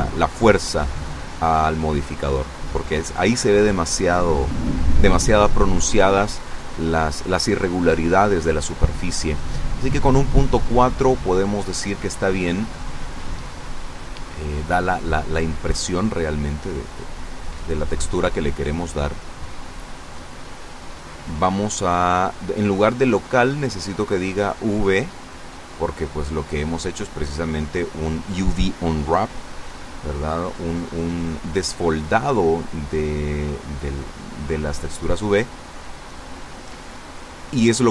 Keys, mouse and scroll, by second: 3.4-6.8 drag, 6.9 click, 8.4 KP_Decimal, 9.1 KP_4, 9.2 KP_0, 9.4 KP_Enter, 11.1-14.9 middle drag, 20.9 click, 24.4 click, 27.2 click.